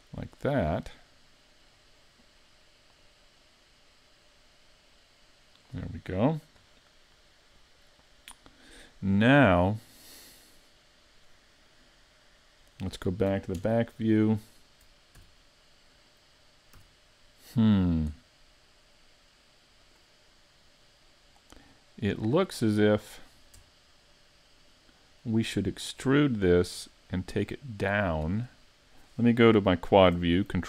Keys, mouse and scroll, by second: 1.9 click, 3.0 click, 13.6 ctrl+KP_1, 15.2 z, 16.8 z, 19.9 click, 22.1 click, 23.6 Tab, 24.6 right click, 26.6 click.